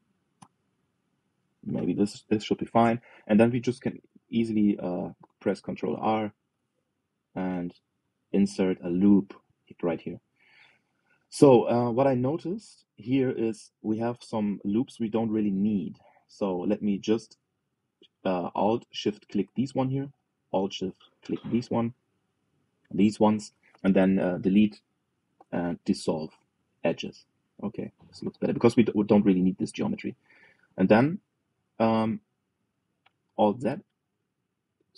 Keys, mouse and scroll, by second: 7.1 ctrl+r, 10.2-12.8 middle drag, 13.0 click, 13.4 middle click, 13.9 scroll up 1, 15.8 click, 16.9 alt+shift+click, 17.7 alt+shift+click, 18.3-21.5 middle drag, 21.5 alt+shift+click, 22.2 alt+shift+click, 22.6-25.0 middle drag, 25.0 Delete, 27.8 scroll down 1, 28.1-32.3 middle drag, 32.3-33.6 scroll down 1, 33.6 scroll down 1, 34.2 alt+z, 34.4-34.8 scroll down 2, 34.8 click.